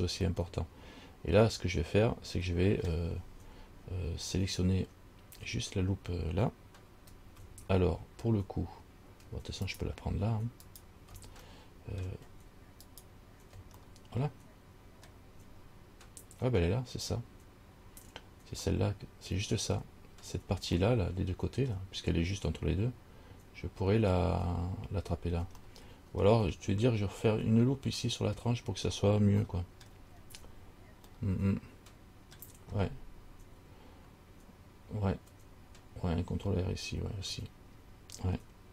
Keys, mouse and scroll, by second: 0.5 middle click, 3.2 scroll down 1, 9.9 alt+right click, 10.9 alt+right click, 11.7 middle click, 11.7 scroll up 1, 12.2 scroll down 1, 13.1 alt+right click, 14.0 middle click, 15.6-16.2 scroll down 2, 18.9 middle click, 19.9 scroll down 1, 21.1 middle click, 21.1 scroll up 1, 21.9 scroll down 1, 25.8 middle click, 26.7-27.4 scroll up 4, 29.6 shift+middle click, 30.0 shift+scroll down 1, 30.3 scroll up 2, 31.3 middle click, 31.3 scroll up 1, 32.6 scroll down 1.